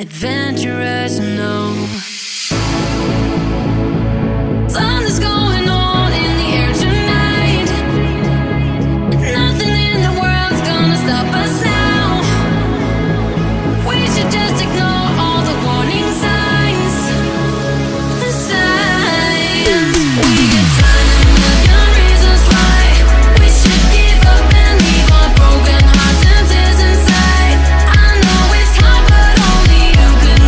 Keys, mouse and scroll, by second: 0.7-3.8 drag, 4.1-6.1 drag, 6.1 shift+a, 8.8 r, 11.3 Tab, 12.0-13.2 drag, 13.2 g, 14.3 shift+middle click, 14.6 scroll down 1, 15.0 scroll up 2, 15.3 shift+middle click, 15.9 click, 16.3 g, 17.7 click, 17.8 g, 18.6 click, 18.8 g, 19.6 ctrl+z, 19.8-21.1 drag, 21.1 e, 22.5 click, 23.4 g, 25.5 click, 25.6 g, 27.0 click, 27.1 g, 29.3 g.